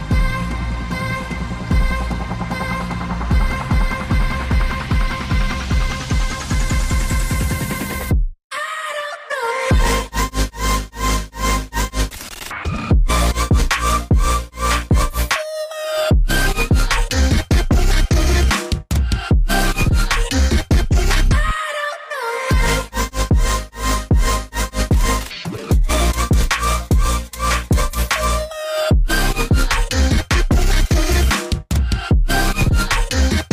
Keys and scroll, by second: 20.9 g.